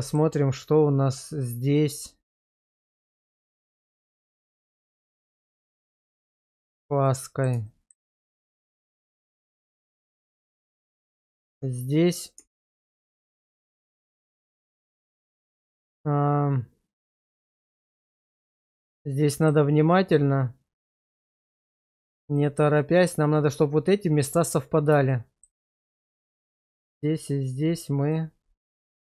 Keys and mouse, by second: 1.8-3.0 middle drag, 3.2 middle drag, 4.6 alt+middle click, 6.5 shift+middle drag, 7.1 middle click, 7.6 shift+middle drag, 8.3-10.9 middle drag, 11.5 Tab, 12.4 Tab, 13.6 Tab, 14.5-17.2 middle drag, 18.9 shift+middle click, 19.9-21.5 middle drag, 25.1 shift+middle click, 26.8 shift+click, 28.1-29.1 middle drag.